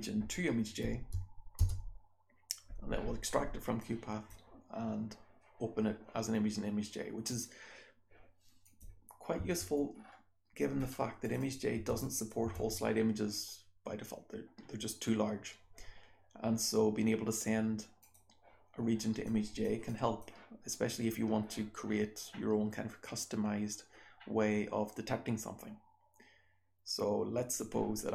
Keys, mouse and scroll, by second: 8.6 click, 9.6 BackSpace, 9.9-10.8 scroll down 1, 10.8-12.0 scroll up 3, 11.2 click, 11.4 click, 11.7 BackSpace, 11.9 click, 12.1 click, 12.4 BackSpace, 17.9 click, 18.7-19.2 scroll down 1, 19.2-19.6 drag, 19.8-20.1 drag, 27.4 click.